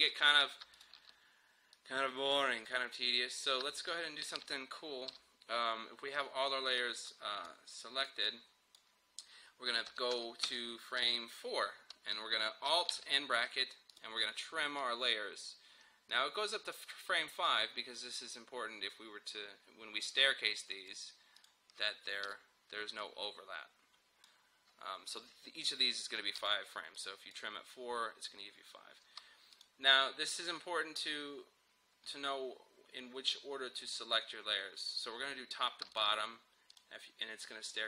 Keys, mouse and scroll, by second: 5.2 [, 6.2-9.9 drag, 9.9 Page_Down, 12.9 alt+], 14.0-21.4 drag, 22.3 [, 23.0-26.4 drag, 26.4 [, 27.0-29.6 drag, 34.9 click, 36.0 shift+click.